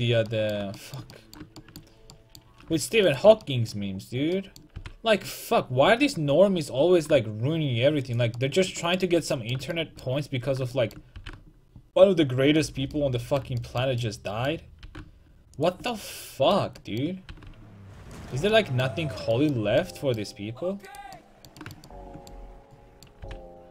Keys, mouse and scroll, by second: 3.1-6.5 right drag, 4.8 g, 8.4-9.6 middle drag, 11.2 g, 14.9 g, 17.3 g, 20.9 right click, 23.3 g.